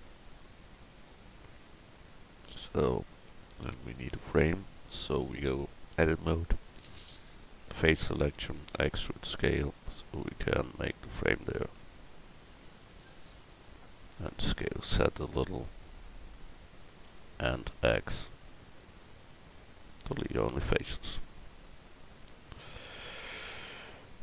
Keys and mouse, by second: 1.4 click, 5.0 Tab, 8.6 e, 14.2 s, 17.7 x, 21.0-24.2 middle drag.